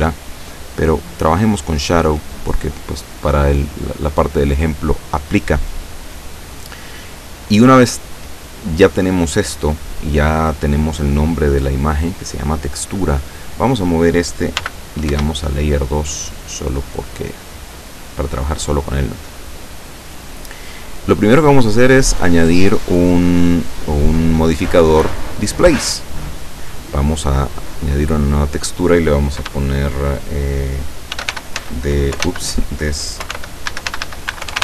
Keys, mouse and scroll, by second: 1.1 click, 2.0 click, 13.4 right click, 13.7-14.7 middle drag, 14.6 m, 15.1 2, 18.0 click, 18.8-19.5 scroll down 1, 19.5-21.3 middle drag, 21.3 click, 21.9 click, 25.3 click, 27.6 click, 28.3 click, 30.9-34.6 typing.